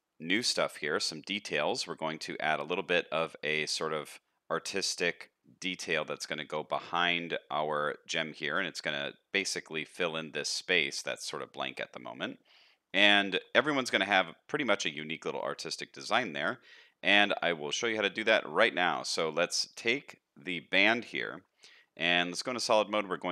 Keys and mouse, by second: 0.6 shift+middle drag, 0.9-1.8 middle drag, 4.6 middle click, 7.0 shift+middle drag, 7.3 middle click, 8.1 middle drag, 10.4 middle drag, 11.7 middle click, 12.6 middle drag, 13.2 shift+middle drag, 13.6 middle click, 14.5 middle drag, 15.4-16.7 middle drag, 17.9 shift+middle drag, 18.3 middle drag, 18.7 shift+middle drag, 19.0 middle drag, 21.2 shift+middle click, 21.8 z, 22.8 middle click.